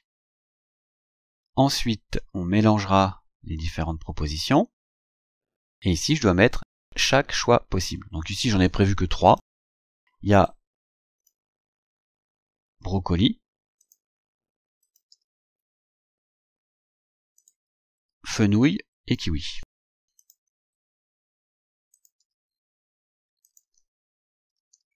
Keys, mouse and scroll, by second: 0.1-0.5 scroll down 2, 0.9-1.3 scroll down 2, 5.3 scroll down 2, 9.3 click, 10.5 click, 12.9 ctrl+c, 13.9 click, 14.9 ctrl+click, 15.2 ctrl+v, 17.4 click, 18.6 click, 19.6 ctrl+c, 20.3 ctrl+click, 20.7 scroll down 2, 22.0 ctrl+click, 22.3 ctrl+v, 22.5 scroll down 2, 23.5 shift+click, 24.3-24.9 typing.